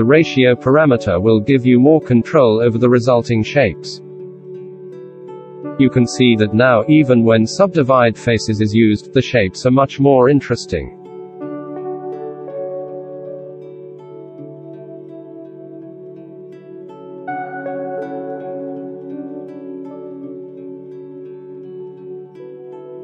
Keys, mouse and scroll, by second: 19.3-20.7 middle drag, 21.6-22.0 shift+middle drag, 22.3 shift+middle drag, 22.9 F9.